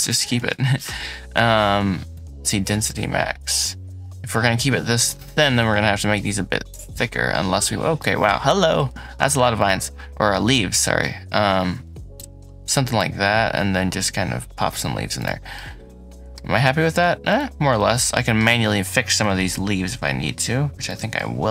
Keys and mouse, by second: 0.3 ctrl+z, 2.0-5.1 drag, 5.1-6.4 middle drag, 6.4 click, 6.6-8.1 middle drag, 9.4 shift+click, 14.6 middle click, 16.2 middle click, 17.4 middle click, 17.8 click, 19.1 g, 19.2 z, 20.5-21.5 shift+middle drag.